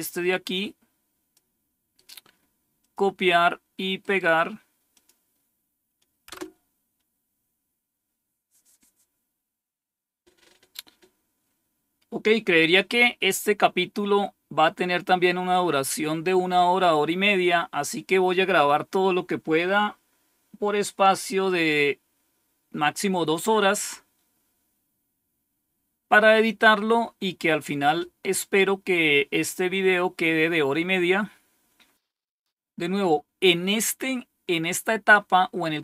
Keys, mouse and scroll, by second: 1.9 right click, 2.8 click, 3.3 click, 3.9 right click, 4.9 click, 6.2 Return, 32.4-35.8 scroll down 2.